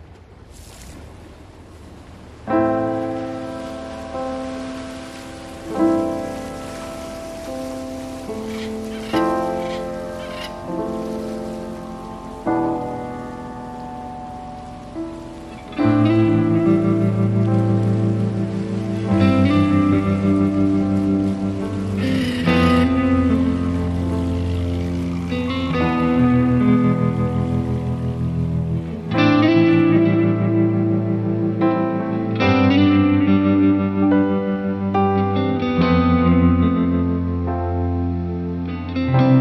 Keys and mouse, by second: 0.6 ctrl+z, 1.2 ctrl+z, 1.6 ctrl+z, 1.9 ctrl+z, 2.2 ctrl+z, 2.3 right click, 2.5 ctrl+z, 2.8 right click, 3.2 ctrl+z, 4.6 ctrl+z, 6.0 ctrl+z, 6.3 ctrl+z, 6.4 ctrl+z, 6.6 ctrl+z, 6.9 ctrl+z, 7.0 ctrl+z, 7.4 ctrl+z, 7.6 ctrl+z, 8.4 ctrl+z, 8.7 ctrl+z, 8.9 ctrl+z, 9.2 ctrl+z, 9.5 ctrl+z, 10.2 ctrl+z, 10.8 right click, 11.0 ctrl+z, 11.3 ctrl+z, 11.8 ctrl+z, 13.7 ctrl+z, 16.5 ctrl+z, 17.4 ctrl+z, 19.7 ctrl+z, 21.0 ctrl+z, 22.8 ctrl+z, 24.1 ctrl+z, 24.6 ctrl+z, 25.6 ctrl+z, 25.8 ctrl+z, 26.4 ctrl+z, 26.6 ctrl+z, 27.1 ctrl+z, 27.3 ctrl+z, 27.7 ctrl+z, 30.2 ctrl+z, 31.0 ctrl+z, 31.2 ctrl+z, 31.6 ctrl+z, 33.9 ctrl+z, 34.5 ctrl+z, 34.8 ctrl+z, 36.9 ctrl+z, 37.1 ctrl+z, 37.3 ctrl+z, 37.7 ctrl+z, 38.0 ctrl+z, 39.2 ctrl+z.